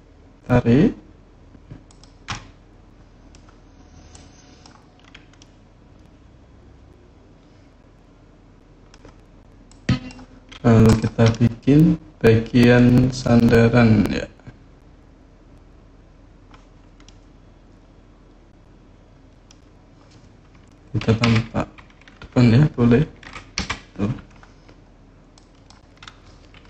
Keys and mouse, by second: 1.6 click, 2.1-3.1 drag, 4.0 click, 5.2-8.1 drag, 8.1 middle click, 8.3 click, 9.5 click, 10.7 click, 11.1-13.0 middle drag, 16.8-19.2 middle drag, 21.0 KP_3, 23.3 KP_1, 25.1 click.